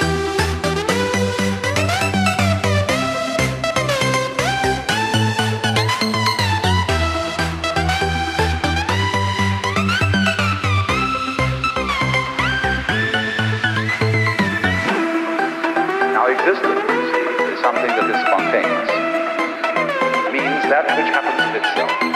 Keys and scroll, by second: 0.4 ctrl+z, 17.2 ctrl+z.